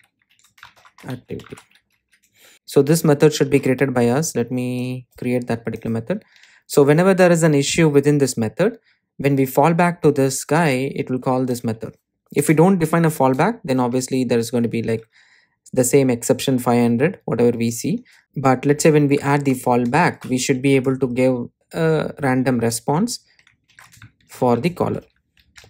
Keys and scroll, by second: 2.5 super+z, 7.5 super+c, 19.6 Return, 23.8 super+v.